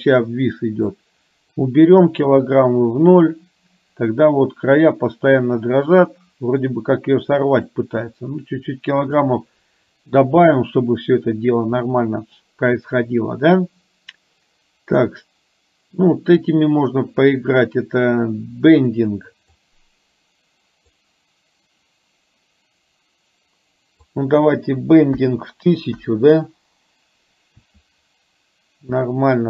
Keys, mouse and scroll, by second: 1.1 click, 7.8-9.3 drag, 15.1-16.6 drag, 19.6-21.1 drag, 24.1-26.1 drag.